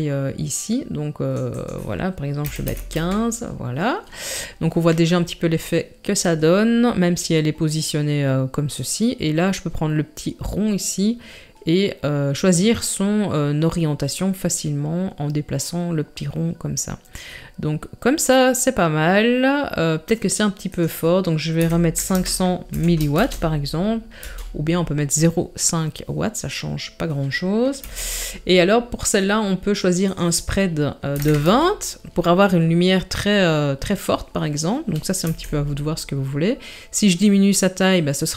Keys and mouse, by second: 1.6-3.0 drag, 8.9-17.2 drag, 20.8-24.3 drag, 22.1 KP_0, 27.8 KP_7, 30.2-31.5 drag, 35.3 s.